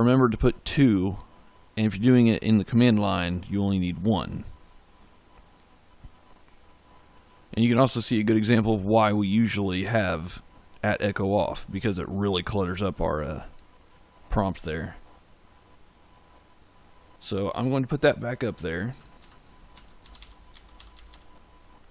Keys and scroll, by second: 19.1-21.4 typing.